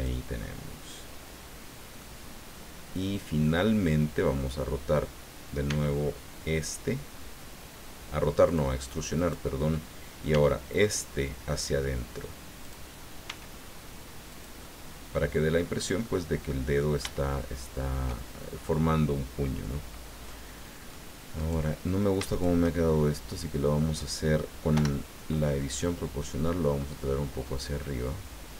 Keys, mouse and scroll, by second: 2.0-3.7 middle drag, 4.4 middle click, 5.7 e, 8.5 click, 9.1 right click, 10.3 e, 12.6 click, 13.2 s, 14.3-15.9 drag, 16.0 middle click, 16.8-18.1 shift+middle drag, 20.3 middle click, 21.4 right click, 22.3 shift+right click, 24.7 o, 25.8 click, 26.5-27.7 scroll up 6, 28.1 scroll up 1.